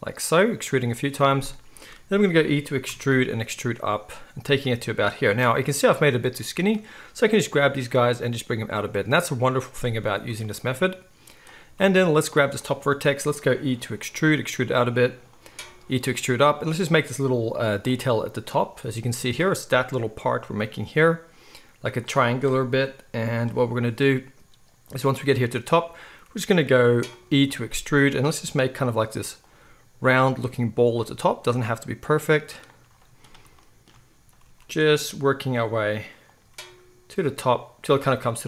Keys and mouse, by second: 2.8 e, 5.9-9.5 drag, 7.5 g, 9.5-11.5 middle drag, 11.5-15.5 shift+drag, 13.6 e, 15.5-38.4 middle drag, 15.6 e, 16.5 e, 27.5 e, 29.6 e, 30.4 e, 31.0 e, 31.6 e, 34.4 e, 35.5 e, 36.4 e.